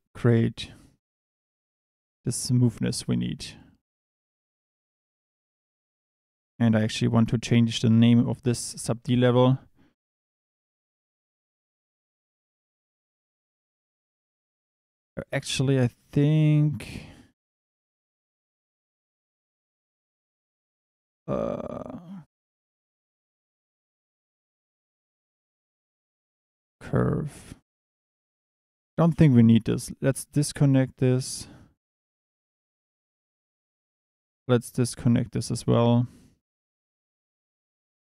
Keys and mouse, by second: 3.5 click, 6.0 click, 7.4 click, 15.1 middle click, 19.6-26.6 drag, 31.1 click, 31.4 Tab, 32.2 click, 34.7 ctrl+right click, 37.8 click.